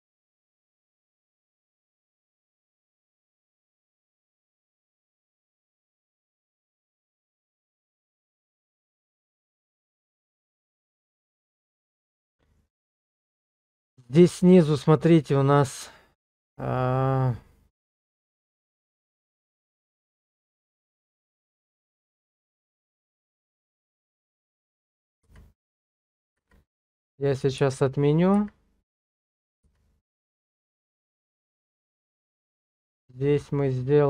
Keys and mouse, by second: 3.2 middle click, 3.8 shift+middle click, 5.3 KP_0, 12.2 shift+middle click, 17.7-23.6 middle drag, 25.3-31.5 ctrl+z, 31.8-33.4 middle drag.